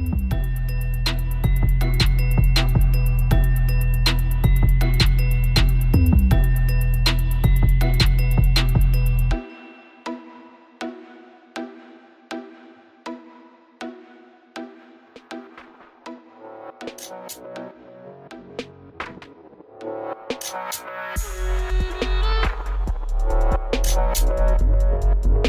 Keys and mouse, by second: 2.0 right click, 2.5 w, 3.4 w, 4.1 right click, 4.6 w, 5.4 w, 6.9-8.4 drag, 8.5 right click, 9.1 w, 10.3 w, 11.0 click, 12.6 ctrl+z, 12.7 ctrl+z, 14.2-16.7 middle drag, 17.2 middle click, 18.4 w, 19.5 w, 22.5 middle click.